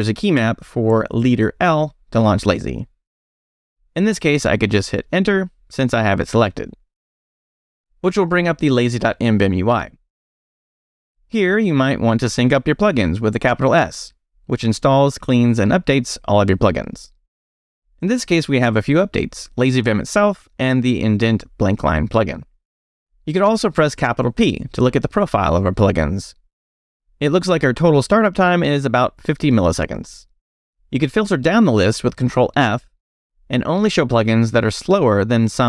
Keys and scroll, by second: 4.5 Return, 12.0 shift+s, 24.6 shift+p, 30.7 ctrl+d, 32.5 ctrl+d.